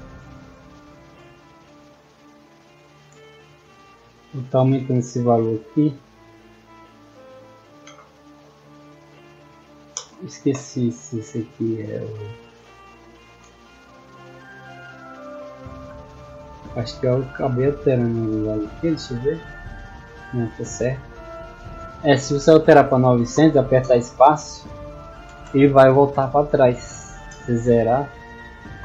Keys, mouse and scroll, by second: 4.1 click, 5.0 click, 6.5 click, 11.0 w, 11.9 a, 12.6 s, 13.4 space, 14.8 w, 16.8 middle click, 16.8-17.7 scroll up 6, 17.1 middle click, 18.1 scroll up 2, 19.0 middle click, 20.1-20.4 scroll down 2, 21.9 click, 23.8 space, 25.2 space, 25.4 space.